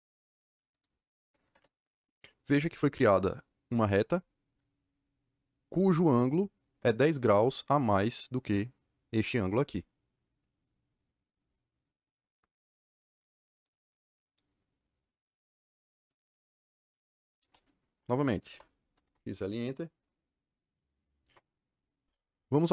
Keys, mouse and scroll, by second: 0.7 click, 1.4 KP_Enter, 18.4 x, 18.7 l, 18.9 Return.